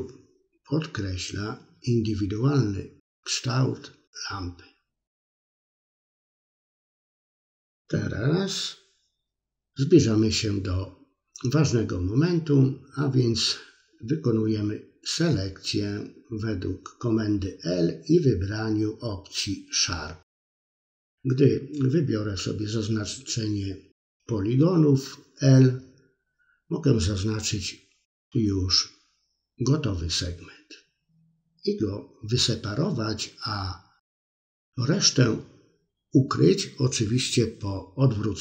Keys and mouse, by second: 0.5 middle click, 0.6 shift+middle click, 0.8 middle click, 1.9-3.6 middle drag, 3.7 middle click, 4.1 middle click, 8.4 click, 10.2 l, 24.9 ctrl+i, 29.0 h, 29.9-32.0 middle drag, 32.2 middle click, 33.1 middle click, 33.7 shift+middle click, 34.2-37.7 middle drag.